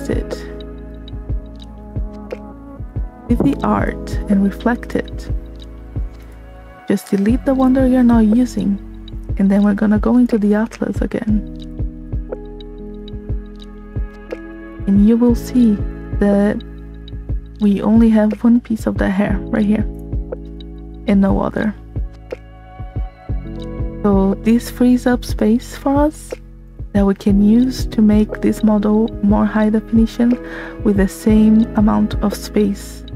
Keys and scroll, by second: 2.6 v.